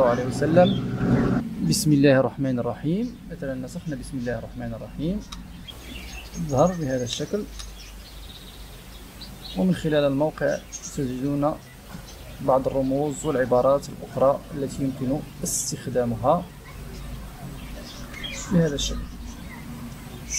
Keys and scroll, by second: 5.3 Return, 7.1 Return, 7.5 Return, 18.0 ctrl+v.